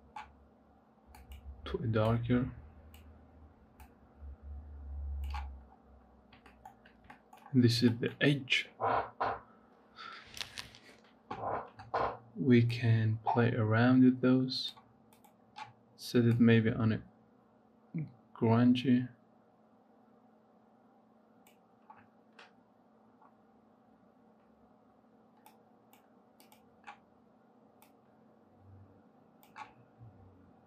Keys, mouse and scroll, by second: 5.7 scroll down 2, 6.4 shift+middle click, 7.3-7.8 scroll up 3, 7.8 shift+middle click, 8.0-11.3 scroll up 2, 12.6-15.1 drag, 22.9 scroll down 2, 23.5 scroll up 3, 25.3-26.5 drag, 30.3-30.6 scroll down 10.